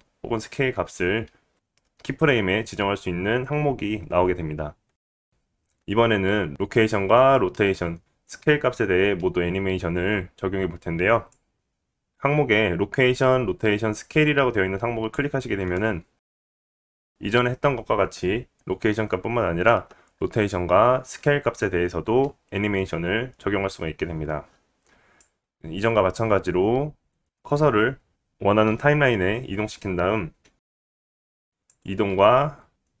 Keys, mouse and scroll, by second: 16.8 click, 25.1-31.7 drag, 30.5 g, 32.9 s.